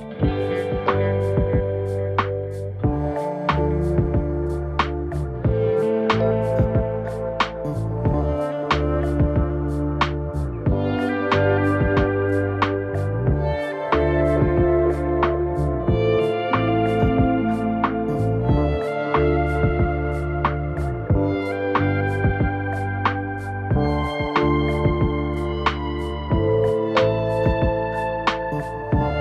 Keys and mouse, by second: 0.8 shift+middle click, 1.8 shift+middle click, 2.3 shift+middle click, 2.7 shift+middle click, 3.6 shift+middle click, 4.0 z, 4.2 middle click, 4.7 Tab, 4.8 middle drag, 5.3-5.9 right drag, 6.2 ctrl+j, 7.7 Tab, 9.6 right click, 10.4 right click, 11.6 m, 12.5 right click, 12.8 right click, 13.4 m, 13.9 shift+middle click, 14.3 right click, 14.5 shift+click, 14.9 m, 15.2 right click, 15.7 m, 16.0 middle click, 16.7 right click, 16.9 right click, 17.1 shift+middle click, 17.6 shift+click, 18.1 m, 19.2 right click, 20.5 shift+click, 21.0 m, 21.6 middle click, 22.1 shift+middle click, 22.6 right click, 23.2 m, 23.8 right click, 24.2 shift+click, 24.7 a, 24.9 a, 25.5 click, 25.8 ctrl+z, 25.9 shift+click, 26.7 shift+click, 27.2 m, 27.7 middle click, 28.0 shift+middle click, 28.3 right click, 28.8 m, 29.1 right click.